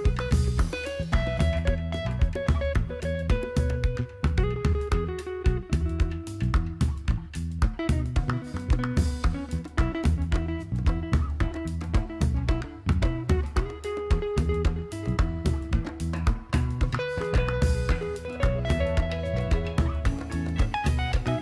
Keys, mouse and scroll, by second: 1.0 click, 8.2 click, 13.1 click.